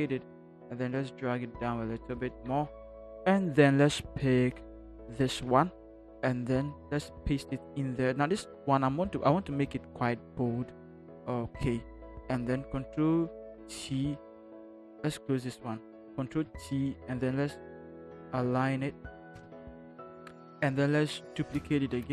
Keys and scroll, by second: 5.8 ctrl+c, 7.1 ctrl+v, 13.6 ctrl+t, 16.3 ctrl+t, 17.7 Right, 17.9 Right, 18.1 Right, 18.2 Right, 18.3 Right, 18.5 Right, 18.7 Right, 19.4 Right, 21.4 ctrl+j.